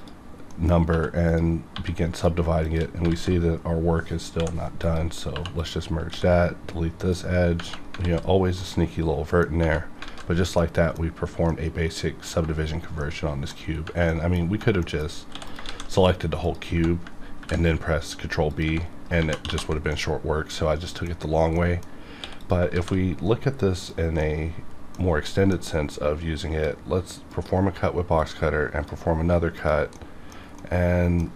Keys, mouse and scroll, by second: 0.0 click, 0.5 middle click, 0.9 2, 1.3 click, 1.7 1, 2.1 click, 2.6 shift+click, 3.1 alt+z, 4.4 m, 4.8 click, 5.3 2, 5.6 click, 6.1 x, 7.0 click, 8.0 alt+z, 8.2 scroll down 1, 8.6 middle click, 10.0 alt+a, 10.6-12.3 middle drag, 13.0 middle click, 14.1 middle click, 14.8 middle click, 15.3 x, 15.5 click, 15.6 shift+a, 16.4 click, 17.4 ctrl+b, 18.5 click, 19.2 ctrl+1, 19.4 ctrl+2, 19.9-21.5 middle drag, 22.2 x, 22.4 click, 22.7 shift+a, 23.6 click, 24.2 middle click, 25.9-29.6 drag, 29.9-31.3 middle drag.